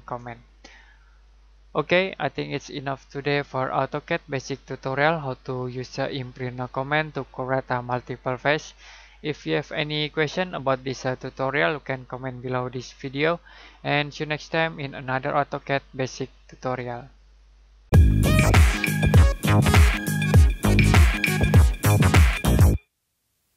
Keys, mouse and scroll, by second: 0.3-0.7 scroll down 1, 0.7 middle click.